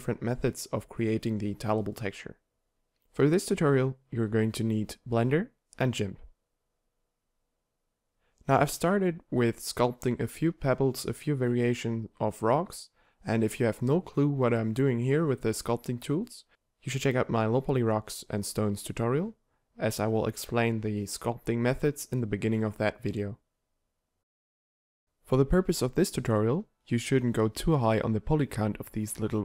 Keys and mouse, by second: 7.1 x, 7.1 shift+s, 7.1 shift+c, 7.4 shift+a, 8.5 Tab, 8.8 w, 9.3 w, 10.2 Tab, 10.7 ctrl+1, 11.2 t, 12.6 t, 17.8 t, 26.6 f.